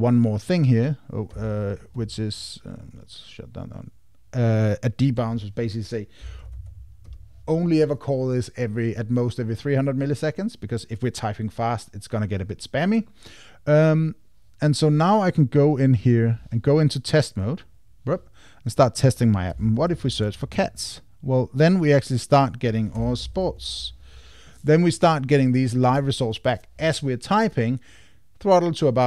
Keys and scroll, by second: 1.3 Escape, 2.2 Escape, 7.0 Tab, 19.5 super+a, 23.0 super+BackSpace.